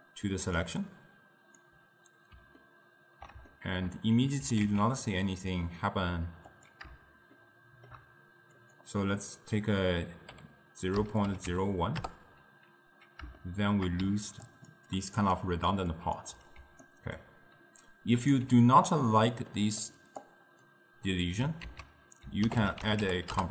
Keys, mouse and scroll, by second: 0.1-0.7 scroll down 1, 0.7-2.7 drag, 2.7-4.5 ctrl+middle drag, 4.5 g, 7.4-8.7 shift+middle drag, 8.7-11.7 drag, 13.5 shift+middle click, 14.1-16.7 typing, 14.5 click, 15.0 click, 15.4 click, 16.0 click, 16.9-18.4 right drag, 18.4 d, 19.6-20.3 middle drag, 20.3-21.7 drag, 21.7 ctrl+a.